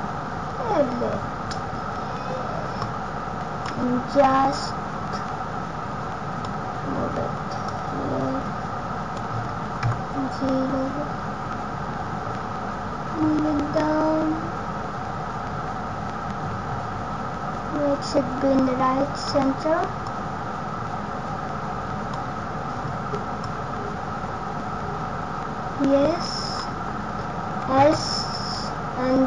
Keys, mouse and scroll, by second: 0.0-0.5 scroll down 1, 0.5 scroll up 1, 1.1 scroll down 1, 2.7 click, 4.6 click, 7.6 click, 9.8 KP_0, 11.3-12.3 scroll down 1, 13.7 click, 20.0 click, 23.4 click.